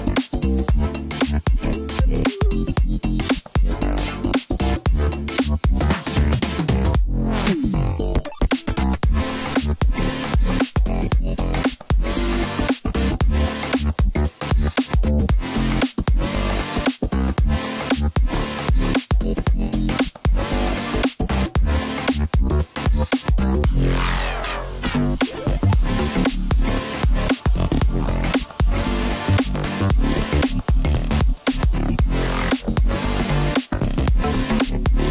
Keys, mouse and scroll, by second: 1.0 Tab, 1.3-3.4 scroll down 11, 3.4 KP_1, 4.3-5.3 scroll up 2, 5.3-8.4 drag, 10.6-13.7 drag, 13.7 s, 16.2-17.0 scroll up 1, 17.0 s, 19.3 s, 25.7-26.7 scroll down 2, 26.7 g, 30.4 g, 34.2-34.9 scroll up 2, 34.9-35.1 scroll down 1.